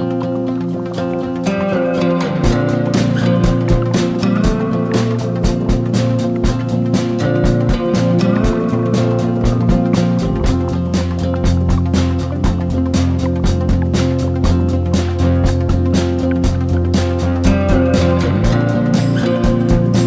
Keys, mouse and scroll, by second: 4.6-10.4 shift+drag, 17.5 shift+click, 17.8 click, 19.1 ctrl+g, 19.8 click.